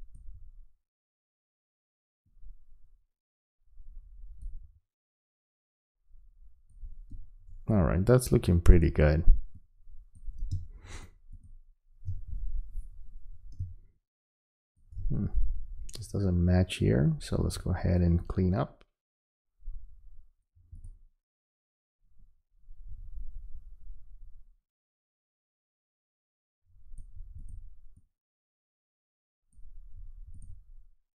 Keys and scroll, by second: 10.5 space, 13.6 space.